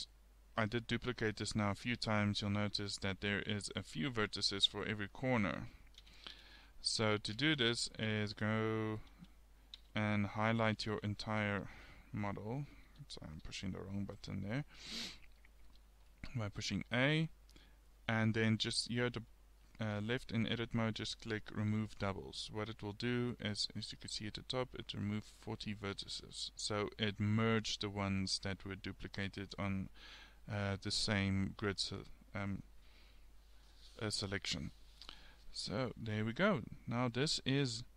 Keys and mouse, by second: 3.6 middle click, 6.1 ctrl+z, 6.4 ctrl+z, 7.2 ctrl+z, 12.9 a, 13.3 a, 20.4-21.9 middle drag, 23.7-25.4 middle drag, 26.0 click, 26.9 middle click, 27.0 click, 27.5 g, 29.1-30.7 drag, 32.2-36.2 middle drag, 36.8 middle click, 37.6 Tab.